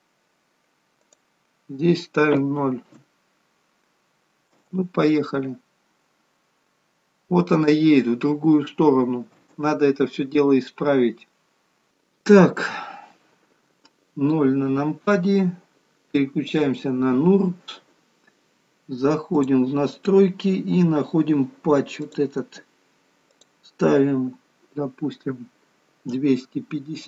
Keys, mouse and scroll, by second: 1.1 click, 4.5 space, 9.5 space, 14.5 KP_0, 16.7 click, 20.0 click, 21.1-21.9 scroll down 2, 21.9-22.6 scroll down 1, 22.6 click, 23.6 click.